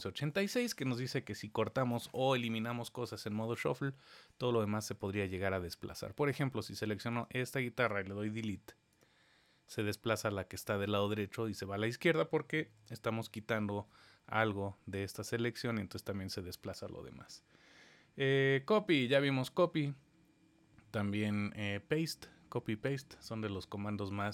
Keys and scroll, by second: 12.7 super+z.